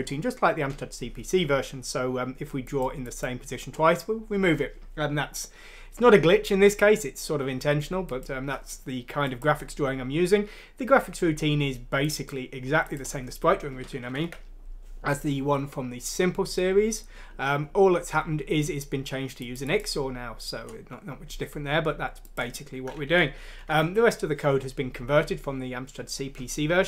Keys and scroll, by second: 14.1 ctrl+End, 23.6 ctrl+Home.